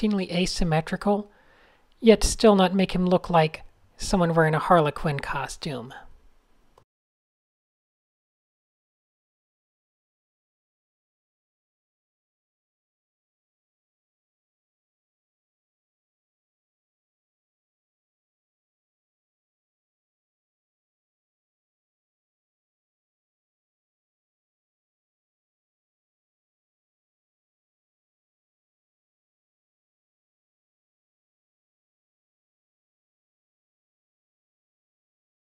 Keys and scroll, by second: 0.0-3.3 typing, 4.0 super+z, 4.8 d, 5.0 super+0, 5.7 super+z, 6.7 n, 13.9-14.9 typing, 16.1 n, 16.8 super+z, 17.5 super+z, 20.0 super+space, 20.1 super+space, 22.9 n, 30.7 d, 31.7 d, 32.3 super+z, 33.4 super+z, 33.8-35.5 typing, 34.4 shift+super+}.